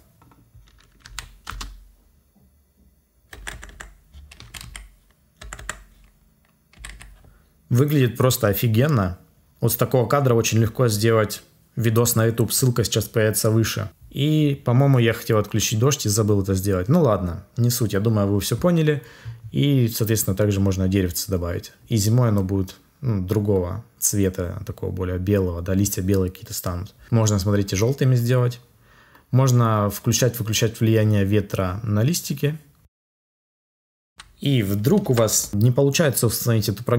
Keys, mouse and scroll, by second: 35.0 ctrl+s.